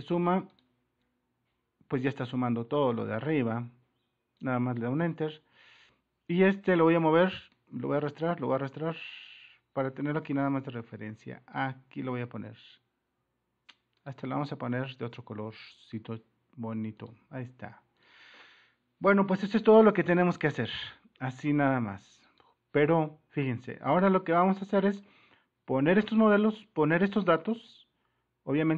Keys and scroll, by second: 4.9 Return.